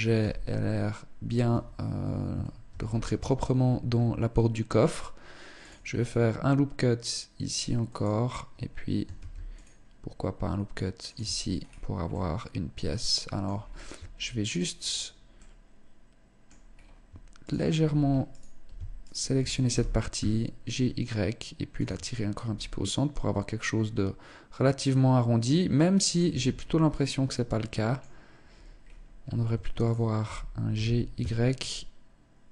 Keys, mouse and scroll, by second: 0.8 Tab, 2.0 ctrl+r, 8.6 ctrl+r, 10.6 Tab, 10.9 scroll down 4, 11.4 middle click, 13.0-13.5 scroll up 4, 13.3 Tab, 13.8 right click, 14.7 middle click, 16.1 scroll up 3, 16.8 shift+right click, 17.6 alt+right click, 18.4 shift+right click, 19.1 g, 21.2 click, 21.2 Tab, 21.5 scroll down 4, 21.9 middle click, 25.6 Tab, 25.9 scroll up 3, 26.4 middle click, 28.2-28.6 scroll up 1, 29.2 alt+shift+right click, 30.1 g, 32.4 Tab, 32.4 click.